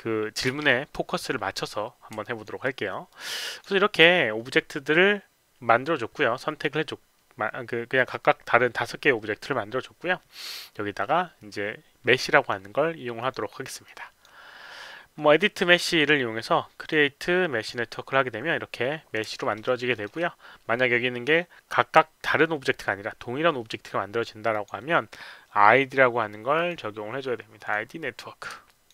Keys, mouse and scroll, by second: 0.0-0.4 typing, 1.8-2.7 typing, 2.2 alt+click, 3.0 click, 3.4 click, 12.3 click, 13.1 click, 13.8 click, 15.8 click, 16.7 click, 17.5 click, 19.3 alt+middle click, 19.6 alt+right click, 19.9 alt+middle click, 24.5 click, 26.5 click, 27.5 click, 28.6 alt+click.